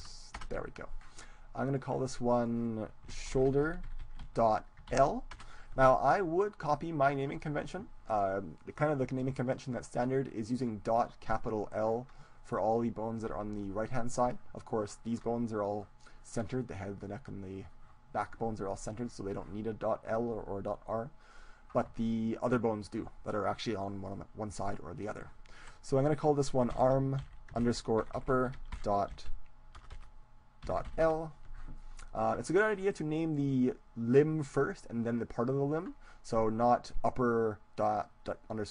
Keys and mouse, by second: 2.1-3.5 right drag, 2.3-4.1 drag, 21.3-23.3 right drag, 24.7-26.5 drag.